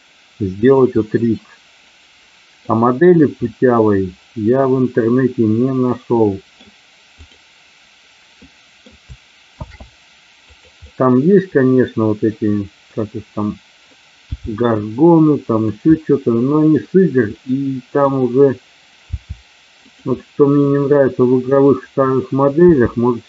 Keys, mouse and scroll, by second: 0.6 click, 1.0-2.7 middle drag, 3.3-6.6 middle drag, 8.3 middle click, 9.5 shift+d, 10.4 click, 10.9-12.9 middle drag, 14.2 g, 15.4 click, 15.9-16.6 scroll up 1, 16.6 scroll up 1, 17.3-18.1 scroll up 1, 19.2 g, 20.2-20.5 scroll up 1, 20.5-22.2 scroll down 1, 22.6 g.